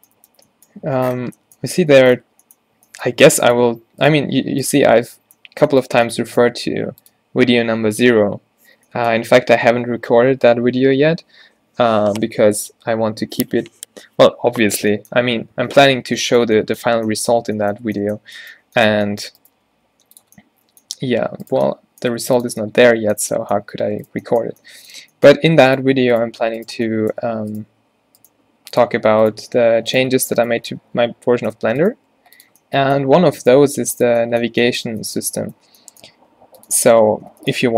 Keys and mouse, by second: 0.0 f, 1.4 middle click, 1.8 Tab, 3.3 Tab, 4.3 g, 6.8 g, 19.4 click, 19.6 g, 21.0 g, 22.2 g, 23.8 g, 27.3 a, 28.4 g, 32.1 g, 33.1 g, 33.8 g, 36.3 g.